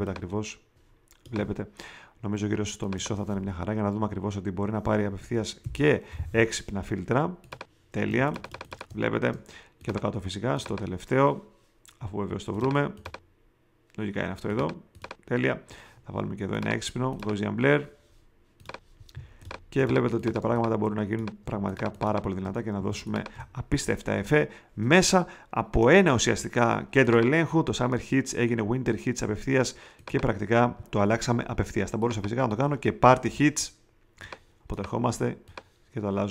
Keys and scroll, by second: 5.1 ,, 6.5 5, 8.0 space, 19.1 space, 22.7 alt+super+space, 33.2 t.